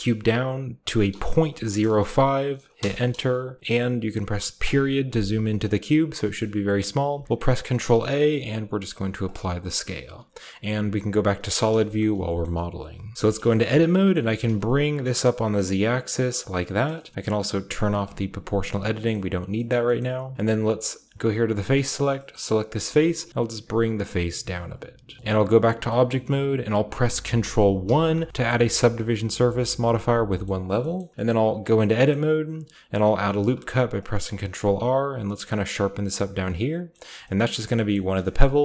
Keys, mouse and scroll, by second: 1.0 ., 1.3 0, 1.7 5, 2.7 Return, 4.5 ., 5.5-6.5 scroll down 1, 6.5-8.9 scroll up 1, 7.1 ctrl+a, 9.2-10.5 drag, 9.7-10.5 middle drag, 9.7-10.5 scroll up 1, 10.7 z, 11.2 z, 11.2 z, 11.9 shift+middle click, 11.9 shift+scroll up 1, 13.1 Tab, 14.1 g, 14.2-15.6 shift+middle drag, 14.2-15.6 shift+scroll up 1, 14.4 z, 16.3-19.6 drag, 16.6-18.0 middle drag, 16.7-18.0 scroll up 1, 18.0 shift+scroll up 1, 19.7-20.7 shift+scroll up 1, 21.1-23.3 drag, 21.9-23.3 middle drag, 21.9-23.3 right drag, 22.6 g, 22.9 z, 24.5 click, 25.2 ctrl+b, 26.0-27.8 ctrl+middle drag, 27.8 ctrl+1, 28.4-30.2 shift+middle drag, 28.6-30.2 shift+scroll up 1, 30.2-30.6 scroll up 1, 30.4-30.7 shift+middle drag, 30.9 shift+middle click, 31.2 shift+middle click, 31.7 Tab, 32.0-33.2 middle drag, 33.3 ctrl+r, 33.9 ctrl+click, 36.1 click, 36.3-37.5 scroll down 1, 36.4-38.6 middle drag, 37.0 Tab, 37.9-38.6 scroll down 1.